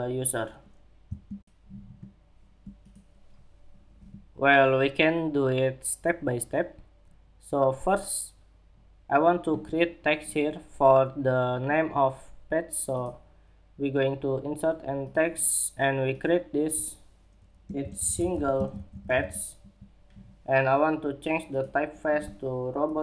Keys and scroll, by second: 19.1 Escape.